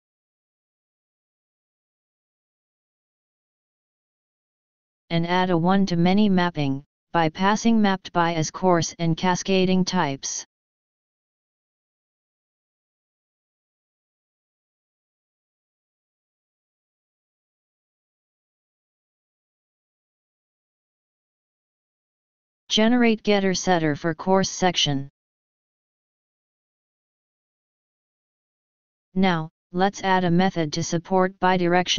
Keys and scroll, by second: 16.5 ctrl+c, 17.6 ctrl+v, 18.1 ctrl+shift+o, 26.9 ctrl+d.